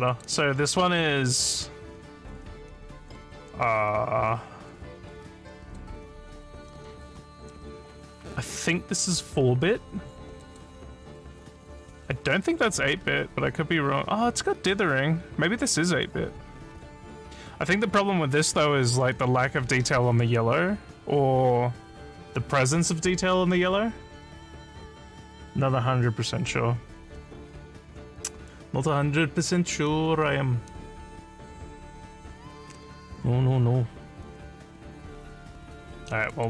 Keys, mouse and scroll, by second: 0.1 click, 5.6 click, 10.4 click, 12.9 scroll up 1, 15.9 scroll down 2, 16.7 scroll up 1, 36.3 click.